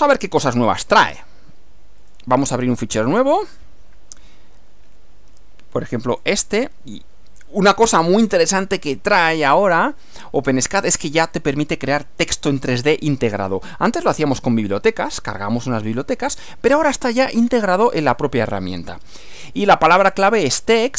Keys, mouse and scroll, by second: 2.0 click, 2.7 click, 6.0 click, 8.2-8.5 scroll down 2, 8.7 scroll down 2, 9.2-11.0 drag, 17.1-18.3 drag.